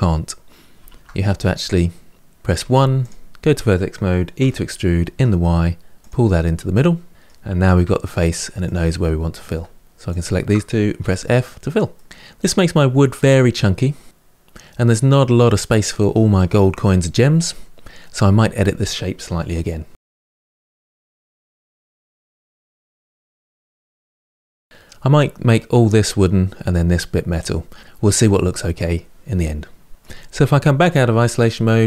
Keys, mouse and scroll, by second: 0.6 ctrl+z, 2.3 1, 2.8 click, 4.2 e, 6.1-7.6 middle drag, 7.6 2, 8.4 click, 9.9 shift+click, 10.7 f, 11.3-11.7 scroll down 2, 11.7 middle click, 13.1-16.0 middle drag, 17.3-19.9 middle drag, 19.9 3, 19.9 middle click, 20.1 click, 20.3 middle click, 20.5 g, 21.3 middle click, 21.6 click, 21.9 g, 22.6-23.7 middle drag, 23.8-26.9 middle drag, 29.9 middle click, 30.5 KP_Divide, 31.6-31.8 scroll down 2.